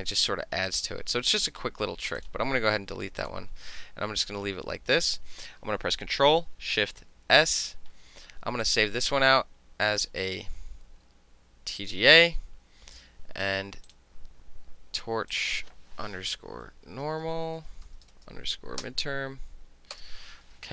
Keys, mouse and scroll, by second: 0.7 click, 2.3 click, 3.3 click, 7.3 ctrl+shift+s, 8.7 click, 11.9 click, 13.9 click, 15.4 click, 16.3-18.7 typing, 18.9 Return.